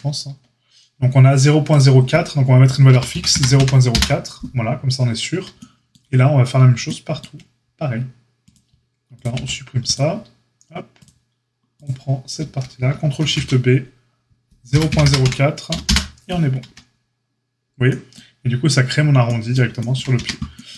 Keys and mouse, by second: 1.6-9.2 drag, 9.2-11.0 middle drag, 9.3 x, 11.0-11.8 drag, 11.8-20.7 middle drag, 13.1 ctrl+shift+b, 16.6 Tab, 20.1 Tab.